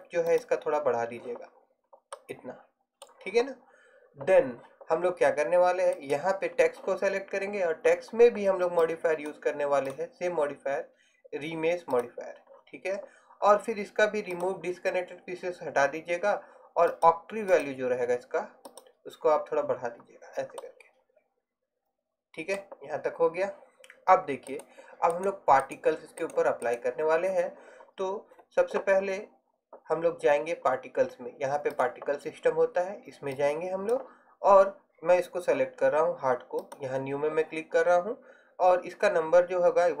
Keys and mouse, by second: 6.0 right click, 14.5-20.3 drag, 20.3 middle click, 20.7-21.8 middle drag, 35.7 middle click, 36.7-40.0 drag.